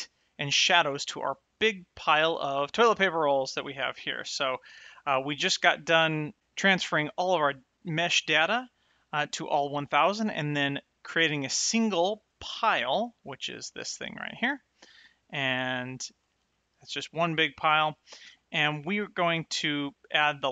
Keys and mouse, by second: 4.0 shift+middle click, 13.5 click, 14.8 click, 16.0 click, 16.4 g, 17.3 right click.